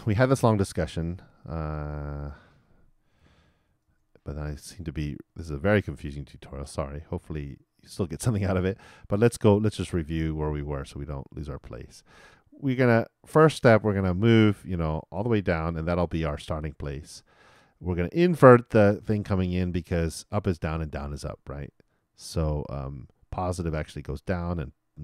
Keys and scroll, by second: 3.7 super+/, 3.8 super+r.